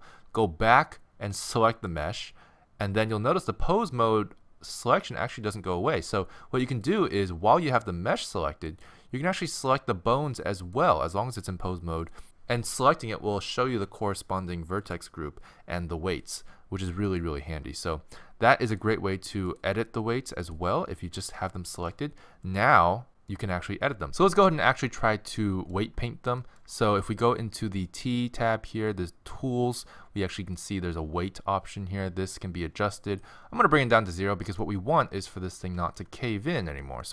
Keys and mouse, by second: 8.4-12.3 middle drag, 14.9-22.4 middle drag, 22.8-24.1 middle drag, 25.1 middle click, 28.9-34.0 drag, 34.1-37.1 middle drag.